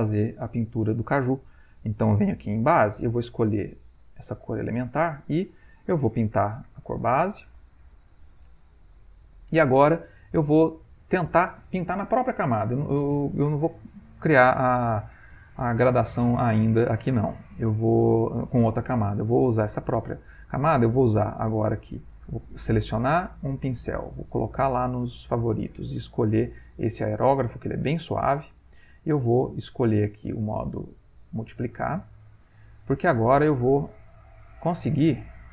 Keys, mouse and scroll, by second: 2.0-3.3 drag, 3.9 ctrl+click, 6.3-10.3 drag, 22.3-24.3 right drag, 24.3 click, 29.6-31.2 drag, 32.9 shift+click, 35.0-35.5 drag.